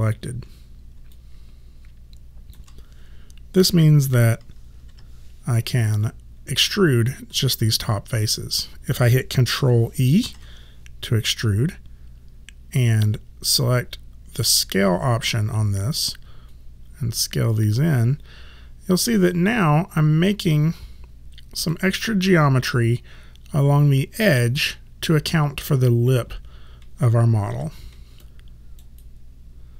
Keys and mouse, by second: 1.2 alt+click, 4.9 5, 10.3 ctrl+e, 14.4 click, 27.5 f, 28.3 click, 29.0 right click.